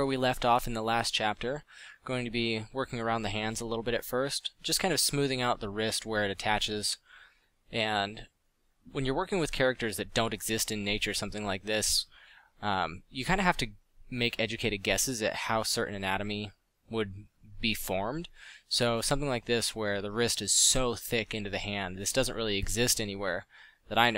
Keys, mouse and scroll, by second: 1.5-3.3 middle drag, 3.5 middle click, 4.2-5.8 middle drag, 7.0 middle drag, 7.5-8.5 middle drag, 12.9 middle click, 14.1 middle drag, 15.1-16.6 middle drag, 19.8 ctrl+z, 22.5 f.